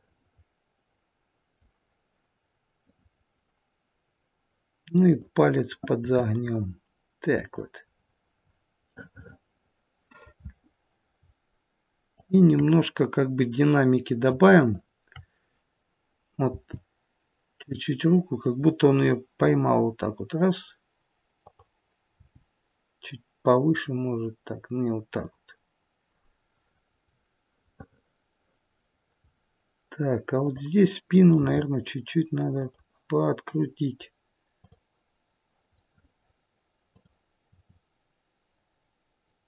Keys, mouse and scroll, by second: 2.7 click, 5.0 click, 5.9 r, 7.8-8.8 scroll down 3, 8.8 middle click, 8.8-11.4 scroll down 4, 12.0 shift+click, 16.4 shift+click, 16.4 g, 22.0 g, 26.5-27.6 scroll down 5, 27.6 middle click, 29.1-30.0 scroll up 1, 30.0 scroll up 3, 30.3 click, 31.3 r, 34.5 click, 35.6 middle click, 36.8 click, 37.4 r.